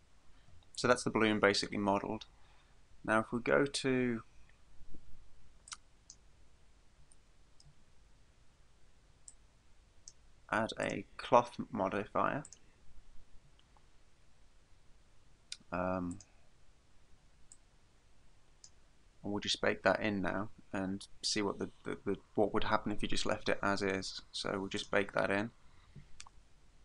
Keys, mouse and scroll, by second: 5.7 click, 7.3 shift+middle click, 9.3 click, 10.8 click, 12.5 click, 16.1 click, 17.5 click, 24.8 click.